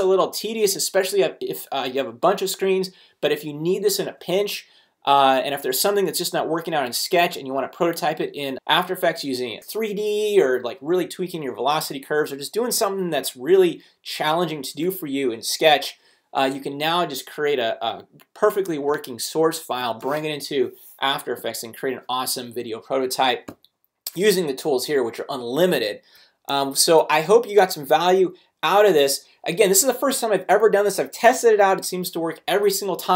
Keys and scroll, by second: 18.7 space.